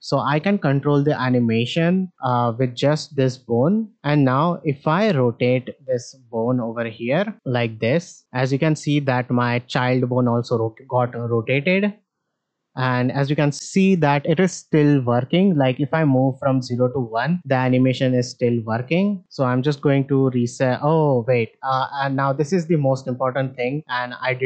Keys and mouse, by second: 4.9 click, 11.6-18.4 drag.